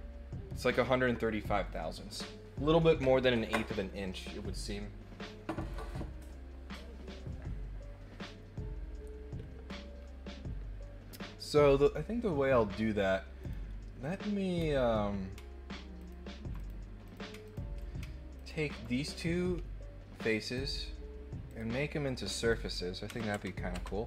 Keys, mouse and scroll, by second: 13.4 click, 14.5 middle click, 14.5 scroll down 2, 14.6 scroll up 2, 15.9 ctrl+click, 16.5 click, 17.0 click, 17.4 ctrl+click, 18.3 ctrl+click, 20.5 click, 21.4 click, 22.3 click.